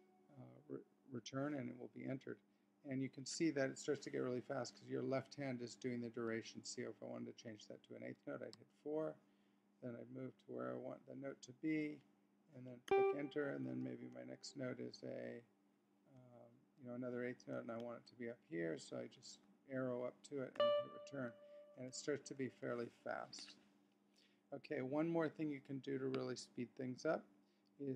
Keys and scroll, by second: 10.2 Up, 12.9 Return, 17.5 Up, 20.5 Return.